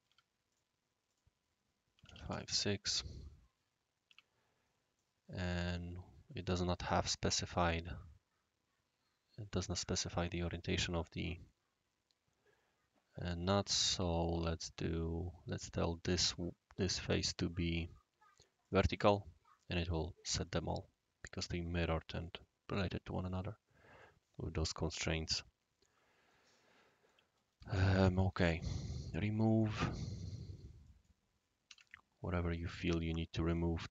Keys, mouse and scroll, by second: 0.0-0.5 typing, 0.5 click, 1.0 click, 1.9 5, 2.0 ., 2.1 6, 2.3 Return, 3.7 scroll down 1, 3.7-4.0 scroll up 1, 4.0 Escape, 4.6 typing, 4.9-14.2 drag, 14.0-14.8 typing, 15.6 click, 15.9-16.2 typing, 16.7 click, 17.5-18.2 typing, 18.6 click, 20.4 scroll up 1, 20.4 scroll down 1, 20.5 scroll up 1, 20.6-23.1 scroll down 1, 23.2-24.0 right drag, 26.3-27.1 right drag, 27.7 shift+e, 28.9 click, 29.3 click, 29.6 typing, 30.8 click, 31.6 typing, 31.7 Tab, 32.5-33.8 right drag.